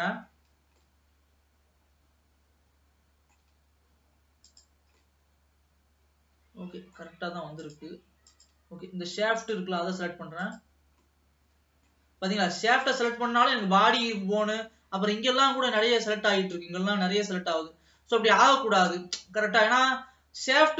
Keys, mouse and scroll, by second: 0.0-1.0 drag, 1.0-4.7 middle drag, 4.7 click, 5.2-7.8 middle drag, 7.8 click, 8.5 click, 9.6 click, 10.6 click, 11.2-13.0 middle drag, 13.0-14.0 drag, 14.0-14.9 scroll up 2, 18.0-18.6 scroll down 2, 19.0-20.7 middle drag.